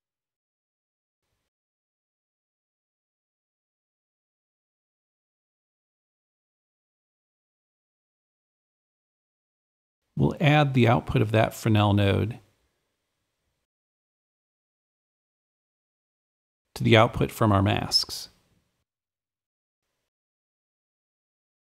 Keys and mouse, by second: 5.1-6.5 super+drag, 6.1 super+f, 8.3 super+r, 8.4 super+e, 8.6 super+s, 8.7 click, 8.8 super+Left, 9.3 super+click, 11.4-13.8 super+drag, 12.5 shift+=, 13.1 Return, 15.7-21.6 alt+drag.